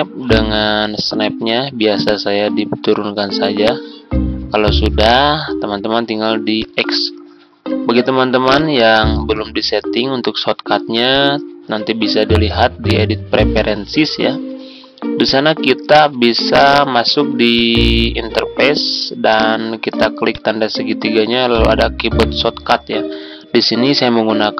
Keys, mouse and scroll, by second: 11.1-24.5 drag.